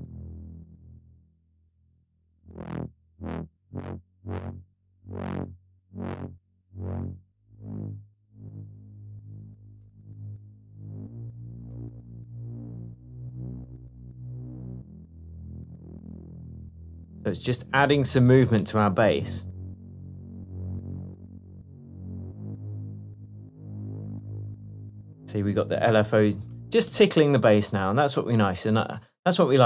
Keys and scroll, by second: 27.1 space, 29.4 Up.